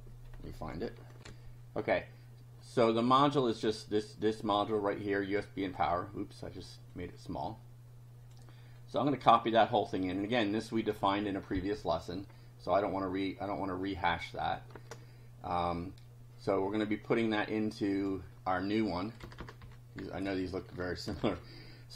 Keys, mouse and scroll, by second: 1.2 ctrl+r, 3.5-4.7 drag, 5.7 click, 7.0-8.5 drag, 8.8 right click, 10.0 click, 12.3 scroll up 1, 12.9-13.6 scroll down 2, 14.8 alt+Tab, 16.9-17.2 scroll down 2, 18.0 click, 19.2 Return, 19.6 Up, 20.0 Home, 21.2 ctrl+v.